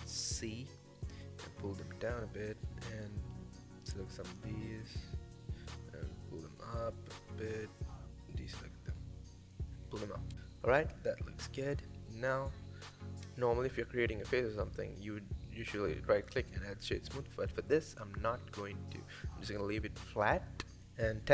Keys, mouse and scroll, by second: 1.2 g, 2.0-3.2 middle drag, 3.2 c, 5.3 middle click, 5.7 g, 7.4 middle click, 7.9 c, 9.8 middle click, 10.2 g, 11.1 middle click, 11.4 Tab, 11.6-13.4 middle drag, 13.4 right click, 14.0-14.7 middle drag, 14.7 scroll up 1, 15.0-15.3 middle drag, 15.3-17.4 right drag, 20.3 middle click, 21.0 click.